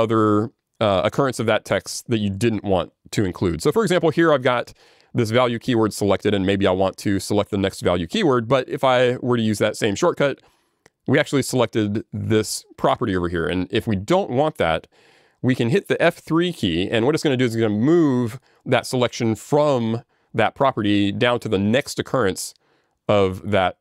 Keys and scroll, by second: 9.4 alt+j, 9.4 ctrl+g.